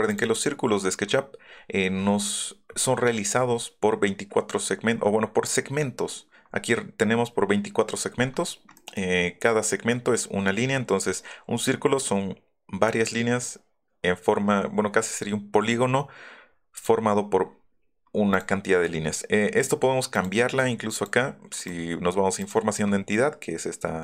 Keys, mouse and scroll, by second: 0.1 click, 0.5 middle click, 1.4 middle click, 8.8 middle click, 9.3 scroll up 1, 16.7 click, 18.3 click, 18.9 middle click, 20.1 click, 20.9 click, 21.5 right click, 22.4 click.